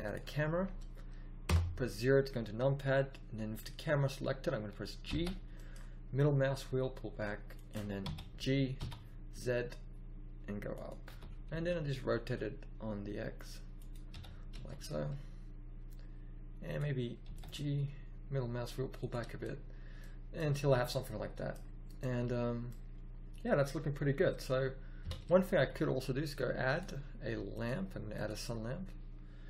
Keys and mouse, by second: 1.4 KP_0, 5.0 g, 8.0 g, 11.0 r, 14.1 g, 17.2 g, 20.5 a, 23.1-23.4 middle drag, 25.0 KP_1, 25.5 a, 26.6-28.4 drag.